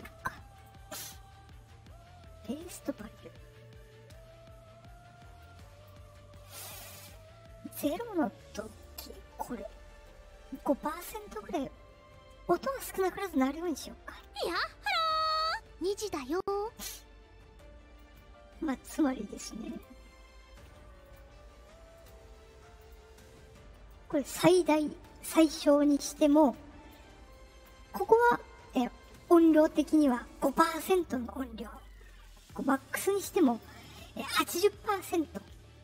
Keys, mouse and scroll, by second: 0.5 right click, 2.5 click, 5.3-5.8 drag, 8.7 click, 12.9 click, 16.7 right click, 17.9 click, 19.6 right click, 21.0 click, 21.9 right click, 22.7 click, 23.8 click, 25.9 click, 26.5 click, 27.2-27.6 drag, 32.7 click.